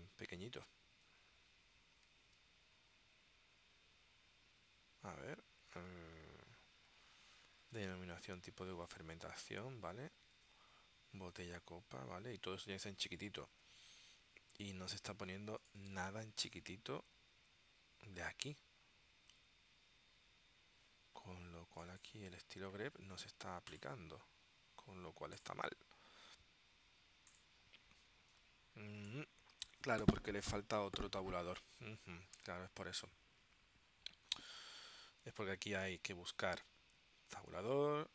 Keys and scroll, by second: 2.4 Tab, 7.7 super+Tab, 9.0 super+Tab, 10.4 super+Tab, 13.6 super+Tab.